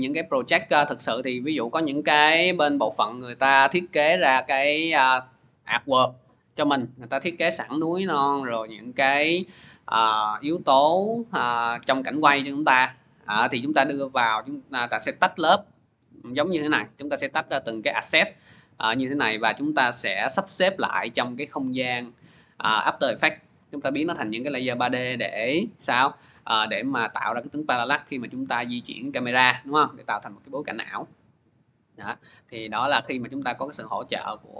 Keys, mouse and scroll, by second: 18.0 click, 19.3 click, 19.7 click, 29.5 scroll, 30.0-30.5 scroll, 31.8 click.